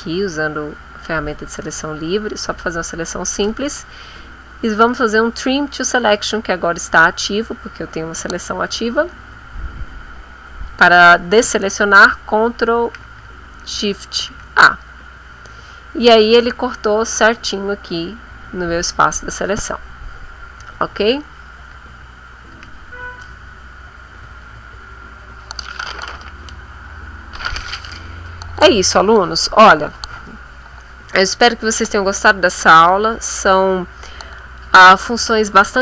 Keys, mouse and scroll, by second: 4.9 click, 8.6 click, 14.2 ctrl+shift+a, 22.5 ctrl+z, 24.4 ctrl+shift+a.